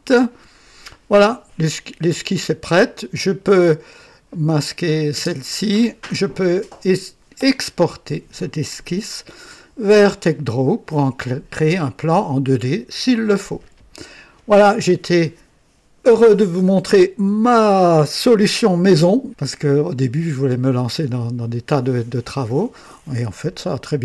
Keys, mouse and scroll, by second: 2.6 click, 4.4 click, 5.0 space, 7.9 click.